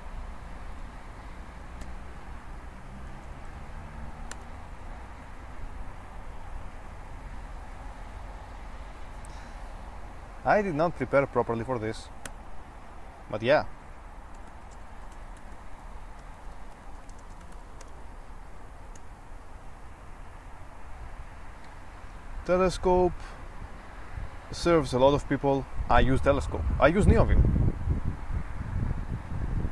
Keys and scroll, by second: 0.0-4.5 typing, 12.4 Return, 14.3-19.2 typing.